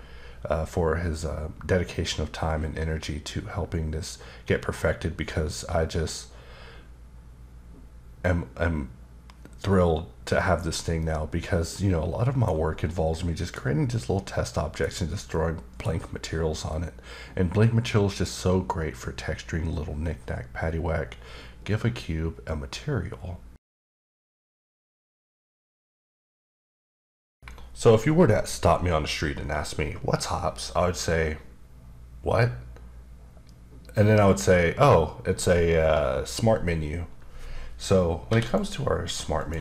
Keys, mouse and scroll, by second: 11.0 middle click, 12.9 middle click, 13.9 middle click, 15.3 middle click, 16.7 middle click, 39.4 click, 39.5 x.